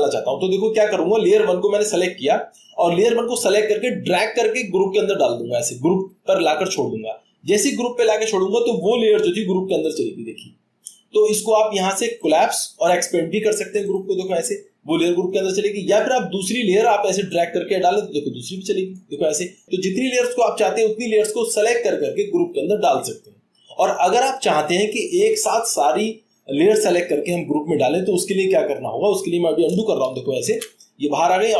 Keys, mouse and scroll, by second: 4.2 click, 5.6-6.8 drag, 7.1 drag, 9.2-10.6 drag.